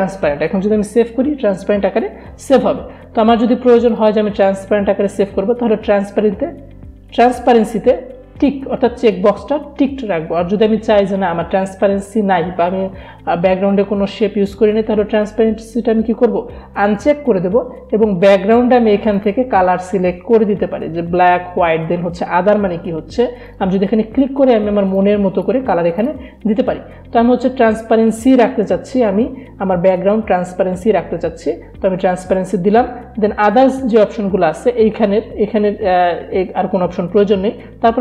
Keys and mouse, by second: 3.2 click, 3.3 click, 19.1 click, 23.4 click.